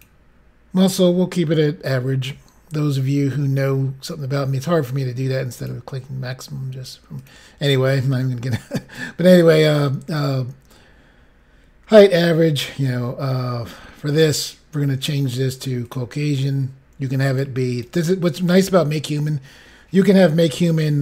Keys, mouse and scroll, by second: 5.5 click, 7.1 click, 14.1 click, 15.8 click, 17.2 click, 17.6 click.